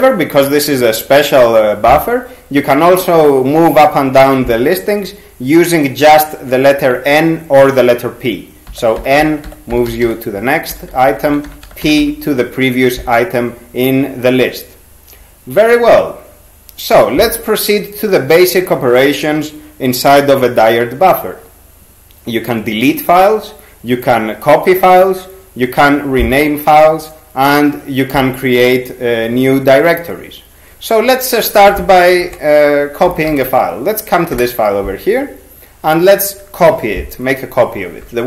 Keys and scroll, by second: 8.7-12.0 typing, 32.2 ctrl+s, 32.8-33.9 typing, 34.3 Return.